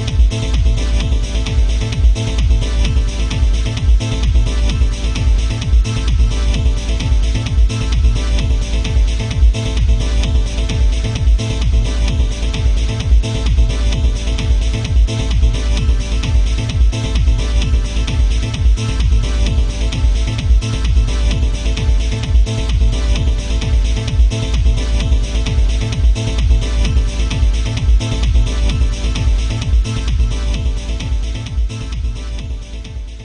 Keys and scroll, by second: 29.5 ctrl+z, 30.8 ctrl+z.